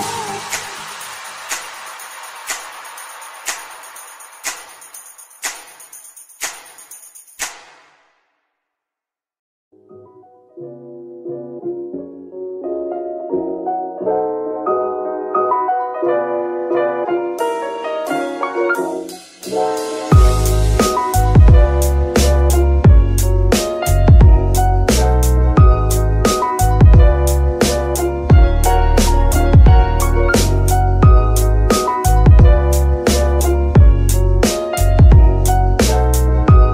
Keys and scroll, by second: 1.0 KP_3, 5.0 g, 7.0 g, 8.5 KP_1, 9.1 g, 10.7 g, 14.4 g, 15.9 Tab, 16.3 s, 17.0 Tab, 17.2 s, 23.7 KP_1, 25.9 ctrl+r, 34.1 F2.